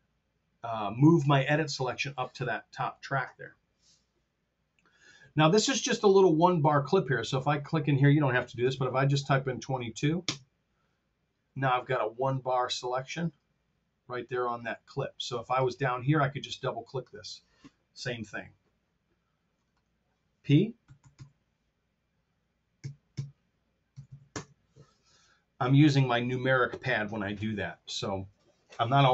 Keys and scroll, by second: 1.6 p, 8.6 KP_2, 20.9 p, 22.8 KP_Divide, 23.8 KP_2.